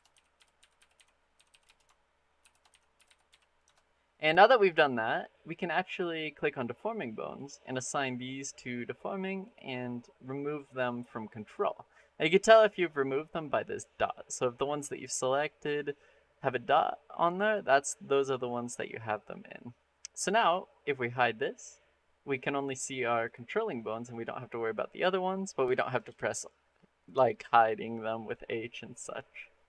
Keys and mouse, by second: 1.3 l, 7.2 click, 10.4 click, 20.9 click, 21.8 middle click, 23.1 click, 23.4 middle drag, 25.8 click, 29.5 middle click.